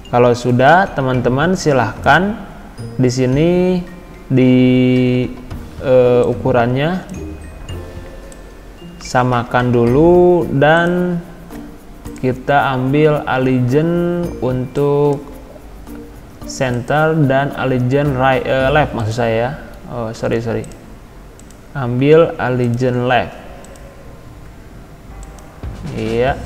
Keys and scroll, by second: 20.1 ctrl+z.